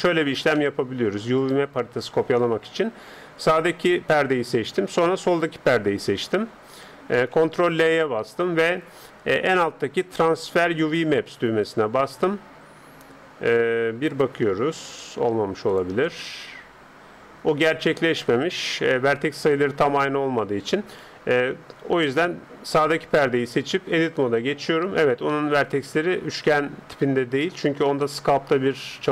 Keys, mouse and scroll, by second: 2.9 right click, 3.7-7.1 right drag, 7.6 ctrl+l, 14.1-15.9 drag, 18.5-20.2 drag, 22.7-24.4 right drag, 23.9 Tab, 24.7-25.3 scroll up 1, 25.3-29.1 middle drag.